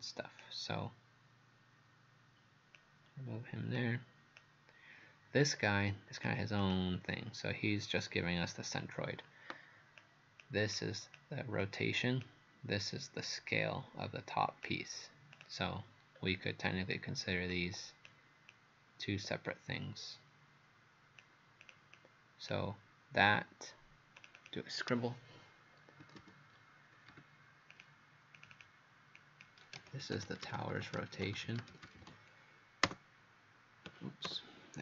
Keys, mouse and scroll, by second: 16.2-16.5 scroll down 1, 17.0-17.5 scroll up 1, 17.5 click, 22.0 click, 24.2 click, 24.4 click, 25.8-27.1 typing, 27.7 click, 28.4 click, 29.2-32.0 typing, 32.9 Return, 34.3 BackSpace.